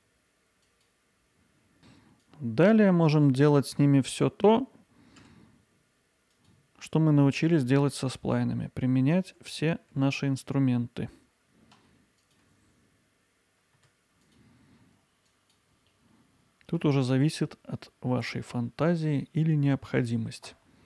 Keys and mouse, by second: 1.8 KP_1, 2.4-3.7 drag, 3.7 g, 5.2 z, 6.3-8.2 drag, 9.4 g, 11.8 z, 12.2 click, 13.8 Tab, 14.2-15.7 drag, 16.2-16.7 alt+middle drag, 18.7-20.1 alt+middle drag.